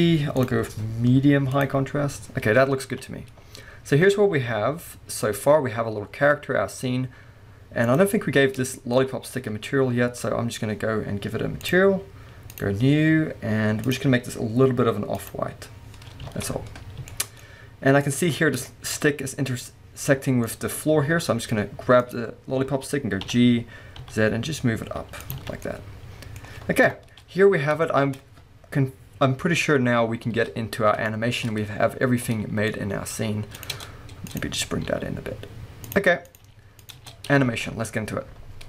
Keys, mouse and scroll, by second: 0.0 click, 0.4-8.0 drag, 2.4-2.9 scroll down 2, 2.9 alt+a, 3.3-5.6 scroll up 2, 5.6-6.7 scroll down 1, 6.9 scroll up 1, 8.8-11.7 shift+middle drag, 9.1 scroll up 1, 10.0 scroll down 1, 11.7 click, 12.6 click, 13.9 click, 16.4 alt+a, 17.2-22.1 shift+middle drag, 17.5-18.1 scroll up 2, 18.4 scroll up 2, 19.1-20.3 scroll up 2, 20.3 scroll down 2, 22.1 click, 23.4 g, 25.4 alt+click, 25.5 alt+a, 25.6-27.6 middle drag, 25.6 scroll down 2, 26.9 KP_0, 27.6 scroll down 1, 28.2-31.1 scroll up 1, 31.1 shift+middle click, 33.2 scroll up 1, 33.6 click, 33.8 Tab, 34.3 click, 34.9 g, 36.3 click, 36.5 g, 37.0 click, 37.3 scroll down 1, 37.6 alt+a.